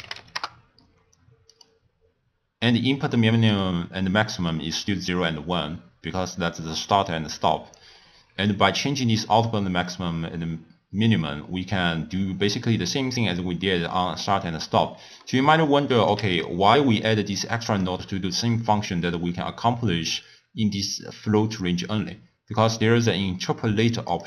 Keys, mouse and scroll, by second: 2.3-3.1 scroll up 1, 3.1 middle click, 3.7-4.9 scroll up 2, 4.9-6.7 scroll up 2, 8.4-11.5 drag, 15.2 middle click, 16.0 click, 17.0-20.0 drag.